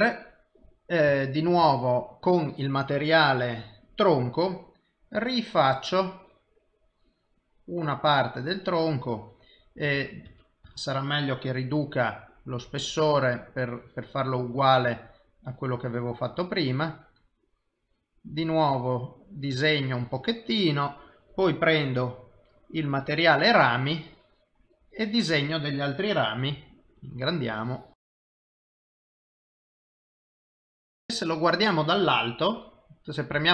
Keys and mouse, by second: 1.6 ctrl+z, 3.1 click, 5.0 click, 8.5 click, 9.2 click, 10.0 ctrl+z, 10.3 ctrl+z, 10.7 ctrl+z, 11.7 f, 13.5 click, 15.4 click, 18.3 click, 18.7 click, 21.8 click, 23.8 click, 26.5 f, 27.5 click, 27.8 i, 28.0 click, 28.2 i, 28.2 f, 28.4 click, 28.5 click, 28.8 f, 29.0 click, 29.2 click, 29.7 click, 29.9 click, 29.9 middle click, 30.8 i, 33.3 KP_7.